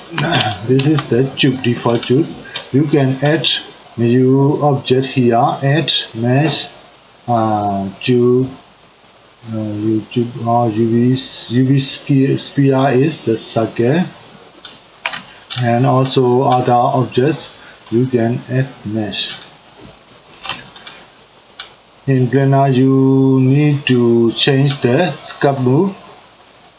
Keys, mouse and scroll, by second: 4.0-7.2 drag, 13.7 click, 14.6-17.8 ctrl+middle drag, 17.8-19.8 drag, 19.8-21.1 middle drag, 21.1 click, 25.4-26.7 drag.